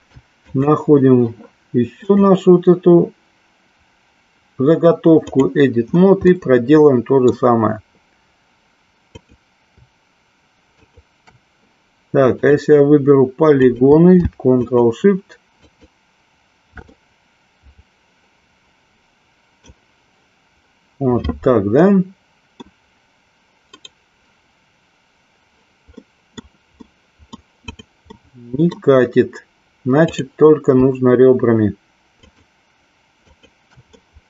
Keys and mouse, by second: 0.6 click, 2.0-5.5 drag, 6.4-7.4 middle drag, 9.0 click, 12.5 click, 13.5 click, 14.9 alt+shift+click, 15.7 alt+shift+click, 17.1-19.9 middle drag, 21.9 middle click, 23.7-27.2 right drag, 27.7 click, 28.1 middle click, 30.1 click, 33.4 shift+click, 34.0-34.2 middle drag.